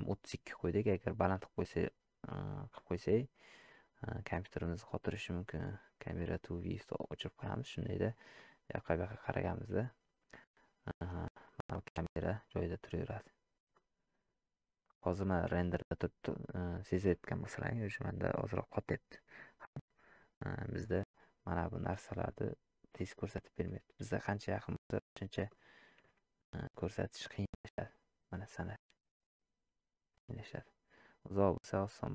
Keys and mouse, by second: 8.3-9.4 middle drag, 12.3-13.4 middle drag, 13.7-14.3 middle drag, 16.3 middle click, 17.1-17.6 middle drag, 18.1-18.8 middle drag, 20.9-21.8 middle drag, 25.6-26.1 shift+middle drag.